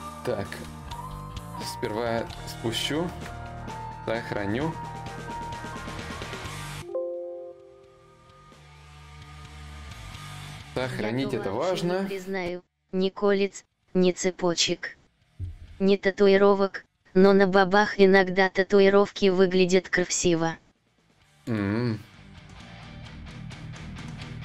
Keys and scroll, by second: 0.2 shift+d, 1.9 shift+d, 2.6 ctrl+s, 6.2 Return, 7.4 Return.